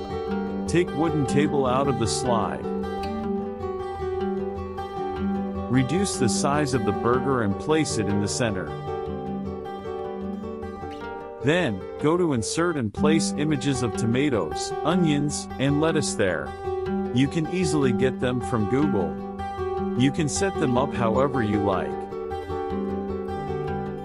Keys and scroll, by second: 16.8 KP_Subtract.